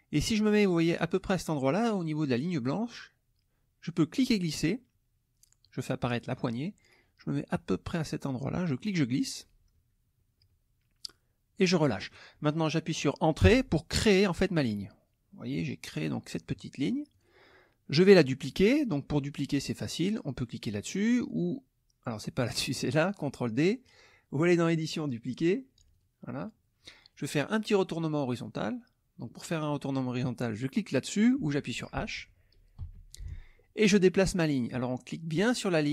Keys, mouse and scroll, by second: 4.1-6.3 drag, 8.6-11.7 drag, 13.4 Return, 17.1 click, 24.5 click, 25.9 click, 32.8 h.